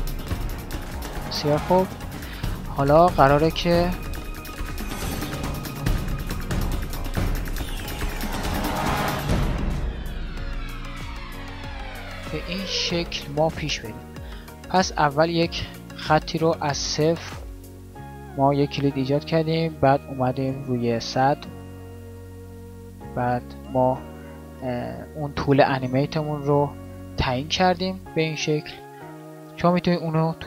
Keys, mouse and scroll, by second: 5.6-10.4 d, 10.4 ctrl+z, 10.8 d, 11.0 d, 11.4 n, 25.8 alt+a, 28.8 alt+a, 29.0 shift+Left.